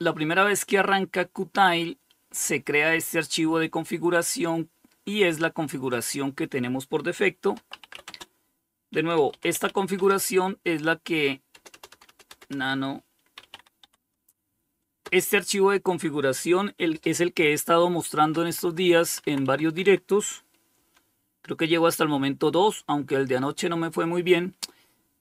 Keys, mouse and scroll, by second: 5.1 click, 6.5-9.4 typing, 10.7 BackSpace, 10.9 BackSpace, 11.1 BackSpace, 11.3 BackSpace, 12.3-13.2 typing, 14.2 Return, 17.4 Down, 17.7 Down, 17.9 Down, 18.0 Down, 18.2 Down, 18.7 Down, 20.0 Page_Down, 24.5 Down, 24.7 Down, 24.8 Down.